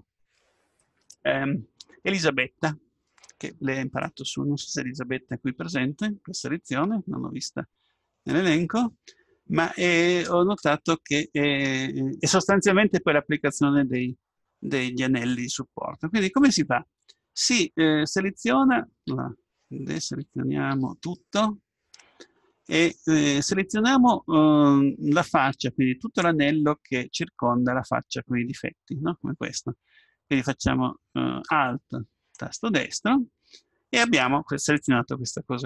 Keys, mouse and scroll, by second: 19.1 a, 20.2 a, 20.7 a, 32.4-34.3 right drag.